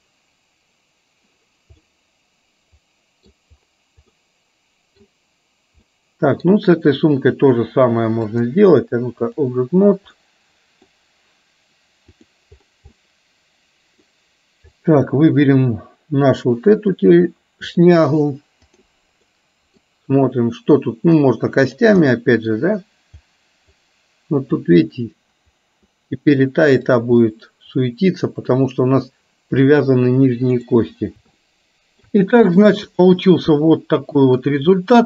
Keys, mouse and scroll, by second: 1.8-3.3 middle drag, 4.2-5.2 middle drag, 5.9 middle click, 8.3-9.6 drag, 10.3 middle click, 12.2 click, 13.1-14.2 middle drag, 16.9-17.9 drag, 18.8 click, 19.3 middle click, 21.2 click, 22.2 middle click, 24.7-27.1 drag, 27.3-28.7 middle drag, 29.7-30.7 middle drag, 30.8 middle click, 31.6-32.3 shift+middle drag, 33.1-34.6 middle drag, 34.9-35.0 middle drag.